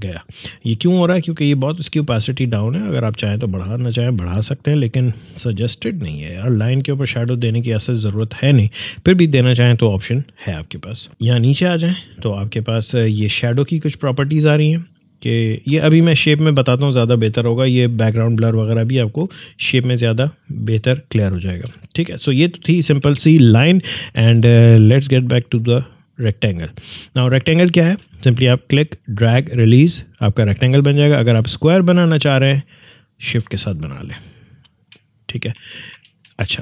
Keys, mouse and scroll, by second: 10.5 click, 11.5-13.7 scroll down 1, 13.8-17.7 drag, 21.5-22.8 drag, 22.8 Delete, 24.7-27.8 drag, 27.8 ctrl+z, 28.8-31.1 drag, 31.1 ctrl+z, 32.5 shift+click, 35.5 ctrl+z.